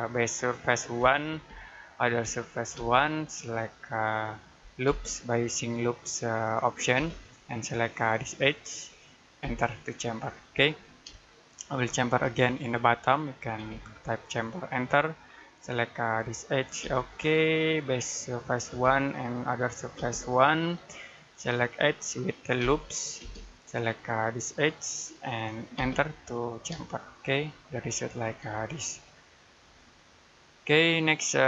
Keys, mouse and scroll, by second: 1.2 space, 2.1 1, 2.6 space, 4.7 l, 6.8 space, 8.3 click, 9.3 space, 10.2-10.6 scroll down 1, 10.6 middle click, 11.2 shift+middle click, 12.3 scroll up 1, 13.4 space, 15.8 click, 16.7 space, 23.0 space, 24.5 click, 25.6 space, 26.3 scroll down 1, 26.7 middle click, 27.7-28.1 scroll down 1, 28.1 middle click, 28.3-28.6 scroll up 1, 28.6 middle click, 29.6-30.0 scroll down 1, 30.0 middle click.